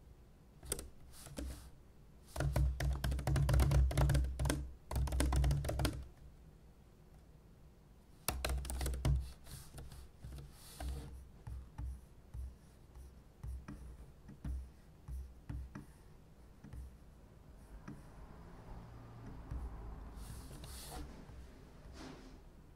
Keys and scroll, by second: 9.9 super+p, 10.3 super+p, 10.8 super+e, 20.5 super+p.